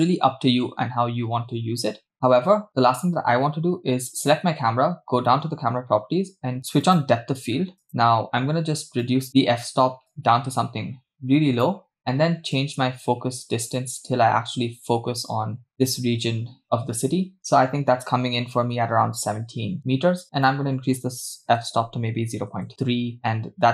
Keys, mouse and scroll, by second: 4.1 click, 6.1-6.8 scroll down 2, 6.8 scroll down 2, 7.0 click, 7.8 drag, 9.1 click, 10.1-11.8 drag, 12.6-15.7 drag, 20.4-22.7 drag.